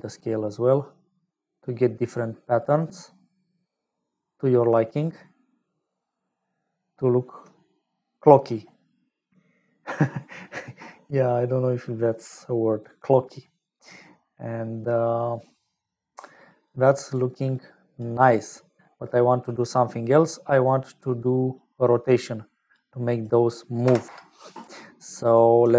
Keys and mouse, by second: 8.2 middle click, 13.7 middle click, 15.8 middle click, 16.7 click, 17.5 click, 19.1 middle click, 20.0 middle click, 21.5-22.8 drag, 23.2-24.9 drag.